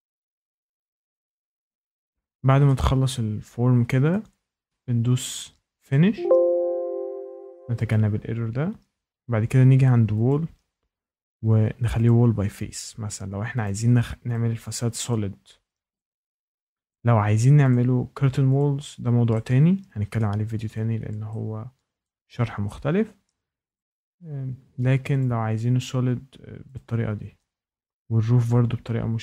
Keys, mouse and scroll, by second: 0.3 click, 1.6 click, 2.1 click, 4.0 shift+right click, 4.5 scroll, 5.8 click, 7.8 click, 10.2 click, 12.0 click, 13.6 click, 14.3 click, 15.0 click, 15.9 click, 16.9 click, 17.7 click, 18.5 click, 20.1 shift+middle click, 20.7 click, 22.0 shift+right click, 23.7 click, 25.2 click, 26.7 click, 28.0 Escape.